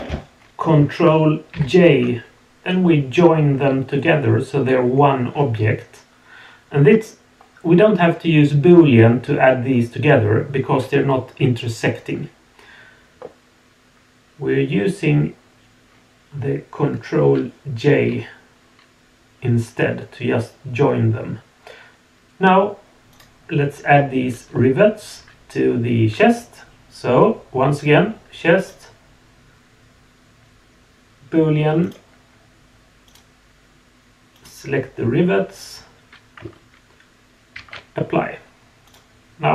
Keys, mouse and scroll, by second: 1.5 ctrl+j, 2.8-6.3 middle drag, 6.3-6.9 drag, 23.1 click, 23.9 scroll down 1, 24.5-26.0 middle drag, 28.6-31.9 drag, 33.0 click, 37.7 ctrl+a, 38.8 click.